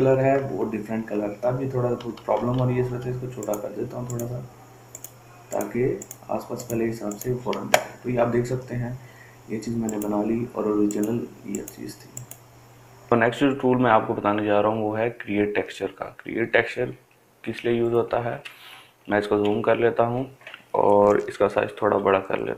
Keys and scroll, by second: 0.8 ctrl+z, 2.4-3.3 typing, 17.8 ctrl+space, 18.2 ctrl+space, 18.3 ctrl+space, 18.4 ctrl+space, 18.5 ctrl+space, 18.5-19.8 ctrl+space, 21.6 ], 21.9 ], 22.2 ].